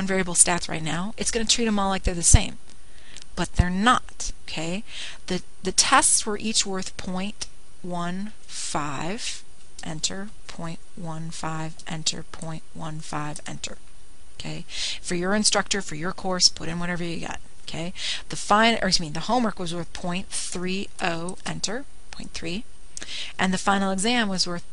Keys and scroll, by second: 5.4 ), 8.5 ., 10.0 1, 10.6 5, 11.2 Return, 12.0-15.2 typing, 13.4 Return, 19.1-19.9 typing, 21.4-23.4 typing.